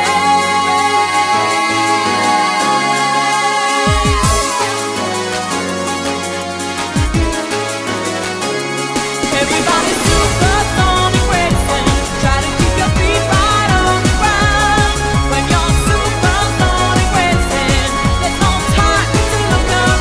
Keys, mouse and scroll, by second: 2.0 click, 4.7 click, 7.1 click.